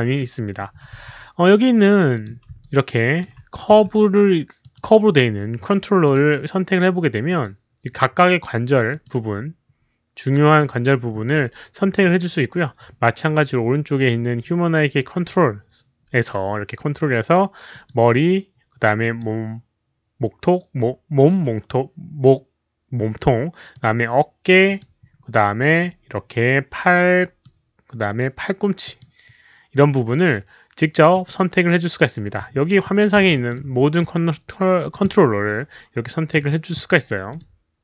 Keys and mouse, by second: 0.1-0.5 alt+middle drag, 0.9 w, 2.1 click, 2.1 alt+middle click, 2.1 w, 2.5-3.1 alt+drag, 3.7-8.9 typing, 4.5 alt+click, 4.5 alt+middle click, 4.7 alt+middle click, 6.0 alt+click, 6.0 alt+middle click, 7.2 alt+click, 7.2 alt+middle click, 8.9 alt+click, 8.9 alt+middle click, 10.4 alt+click, 12.9 alt+click, 12.9 q, 14.4 click, 15.4 click, 17.7 click, 18.9 click, 23.7 click, 24.6 click, 25.6 click, 27.2 click, 28.8 click, 31.1 click, 33.3 alt+middle click, 33.3 click, 34.9 click, 35.4 alt+middle click, 37.2 click.